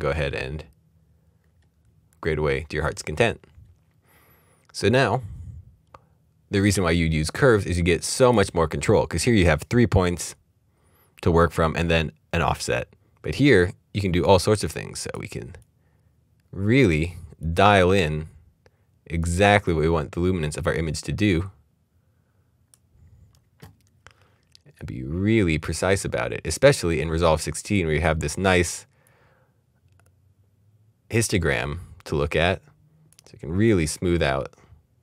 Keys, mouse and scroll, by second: 0.1-1.4 scroll down 1, 1.4-1.8 scroll up 1, 2.9-4.3 scroll down 1, 7.5-8.8 scroll down 1, 8.8 click, 24.8 click.